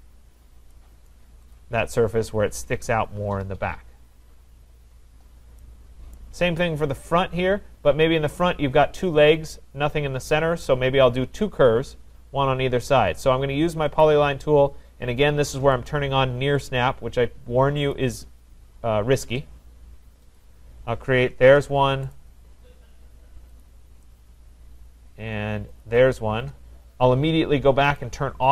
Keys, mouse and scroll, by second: 0.3-0.7 scroll, 1.1 right click, 1.5 click, 1.8-2.3 scroll, 2.5 scroll down 4, 3.8 scroll, 5.1-6.2 scroll, 6.2 right click, 6.5-7.0 scroll, 11.1 middle click, 14.0 click, 15.9 click, 17.9 click, 20.4 click, 21.5 Return, 22.1 right click, 23.6 click, 25.8 click, 26.3 Return, 28.0 click.